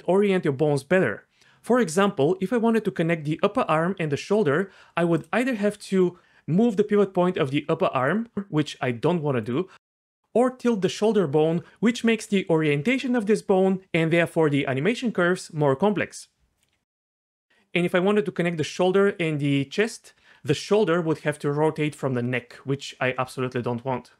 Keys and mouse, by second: 5.2 click, 5.7 g, 8.0 click, 8.3 g, 9.4 click, 9.8 click, 10.0 g, 16.6 click, 17.3 g, 18.3 g, 20.4 g.